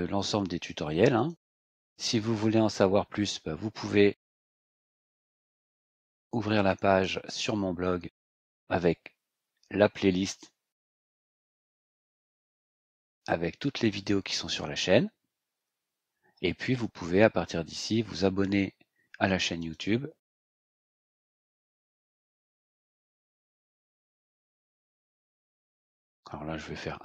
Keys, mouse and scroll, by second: 1.1 click, 4.6 ctrl+click, 5.9 click, 6.9-7.6 scroll down 4, 8.0 scroll down 2, 10.0-10.4 scroll down 2, 11.1-11.6 scroll down 2, 14.5-14.9 scroll down 2, 15.4-16.3 scroll up 4, 19.6 ctrl+click, 20.6 click.